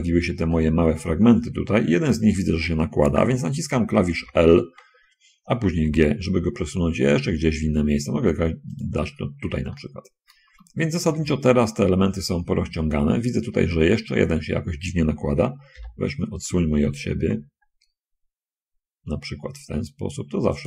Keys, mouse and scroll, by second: 0.7-1.8 shift+middle drag, 4.4 l, 6.1 g, 9.0 click, 9.5 scroll down 1, 9.7 shift+click, 10.8 shift+a, 11.2 b, 12.7 Escape, 13.0 middle click, 13.4 middle click, 15.8 l, 17.2 g.